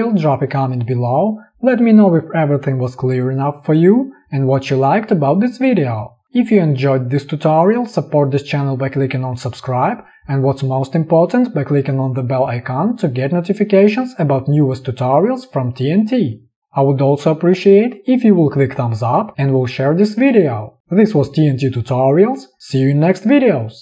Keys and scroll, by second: 3.5 g, 5.7 a, 7.6 ctrl+].